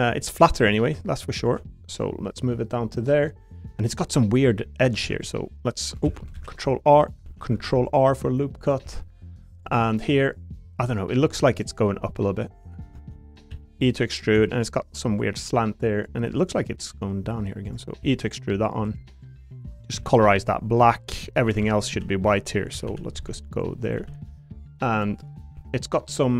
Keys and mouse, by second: 1.4 ctrl+shift+click, 2.0 click, 3.3 middle click, 3.9 middle click, 4.5 middle click, 5.0 ctrl+r, 6.0 ctrl+z, 6.3 ctrl+r, 7.2 ctrl+z, 7.6 ctrl+r, 8.6 click, 8.8 3, 11.6 shift+click, 13.5 e, 14.1 click, 14.3 2, 14.5 click, 16.2 3, 16.4 click, 18.0 e, 18.9 click, 19.1 click, 19.9 a, 20.2 g, 20.8 click, 21.4-24.0 typing, 24.9 click, 25.3 middle click, 25.5 3.